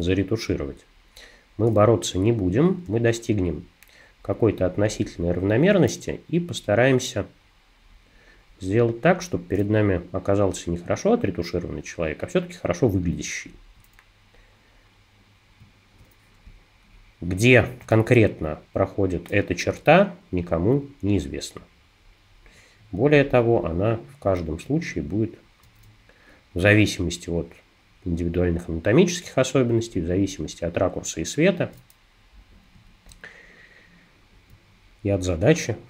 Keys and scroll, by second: 2.8 space, 16.4 space.